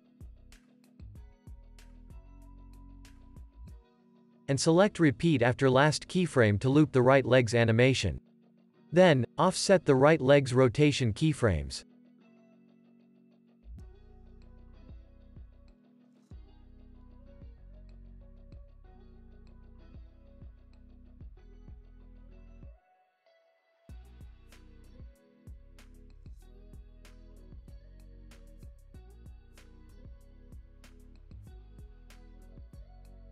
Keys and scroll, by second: 1.2 super+s, 1.4 space, 3.9 space, 9.8 alt+q, 10.6 space, 17.4 space, 17.7 super+s, 26.0 alt+q, 29.4 space.